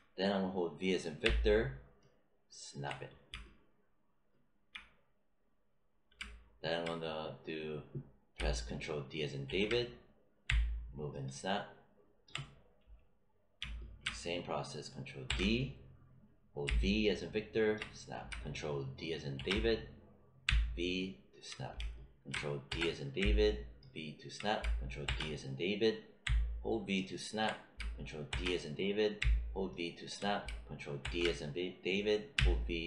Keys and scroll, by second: 1.1 v, 9.4 ctrl+d, 10.4 v, 15.2 ctrl+d, 16.6 v, 19.3 ctrl+d, 20.4 v, 22.6 ctrl+d, 23.1 v, 25.0 ctrl+d, 26.2 v, 28.2 ctrl+d, 29.1 v, 31.0 ctrl+d, 32.3 v.